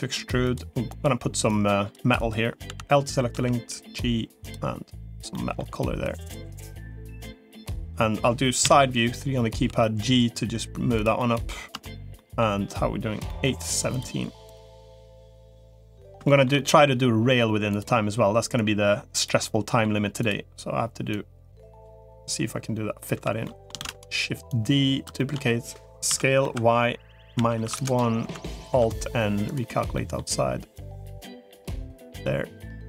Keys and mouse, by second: 0.8 click, 1.4 click, 2.0 click, 2.6 l, 3.2 g, 5.2 middle click, 6.0 click, 7.0 middle click, 8.6 KP_3, 9.6 g, 11.0 middle click, 11.8 shift+middle click, 13.2 middle click, 15.0 click, 15.6 middle click, 16.2 shift+middle click, 18.4 click, 19.2 middle click, 21.0 click, 23.0 l, 23.4 middle click, 23.6 shift+d, 24.4 click, 25.0 shift+middle click, 26.0 s, 28.6 alt+n, 29.8 middle click, 30.6-31.8 drag, 32.0 middle click.